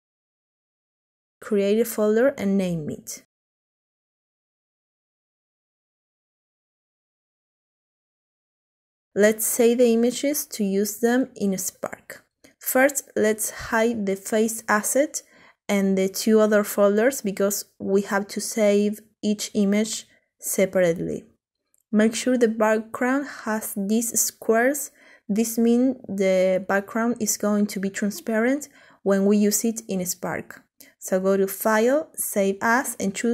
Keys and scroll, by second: 5.6-9.6 typing.